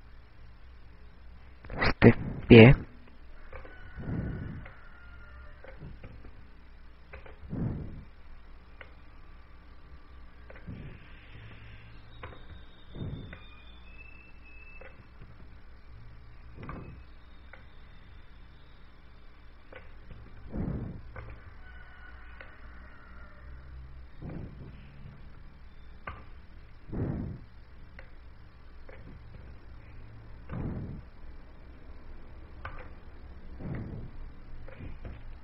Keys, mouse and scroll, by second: 0.6 click, 5.5 right click, 6.6 click, 7.9 i, 9.0 right click, 10.8 click, 12.9 i, 13.9 right click, 13.9 click, 17.0 i, 18.6 right click, 19.5 click, 22.0 i, 23.5 right click, 24.4 click, 26.4 i, 28.0 right click, 30.0 click, 30.9 i, 32.8 right click, 34.1 click.